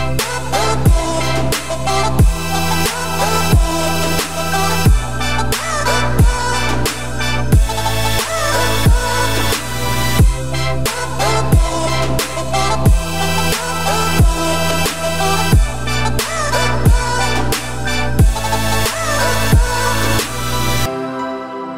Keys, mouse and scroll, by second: 0.0-0.1 typing, 0.3 scroll down 4, 0.4-1.4 middle drag, 1.4 Tab, 1.9 click, 2.1 Tab, 2.8 click, 3.0 scroll down 1, 3.2-3.9 middle drag, 3.9 click, 4.1 `, 4.6 middle drag, 4.9 scroll up 4, 5.5 g, 6.7-9.9 middle drag, 10.7-11.3 scroll down 6, 11.3 click, 11.5-12.2 scroll down 5, 12.2-12.7 middle drag, 12.7-13.3 scroll up 3, 13.3 click, 13.5 scroll down 2, 13.6-16.5 middle drag, 16.5 `, 17.1 click.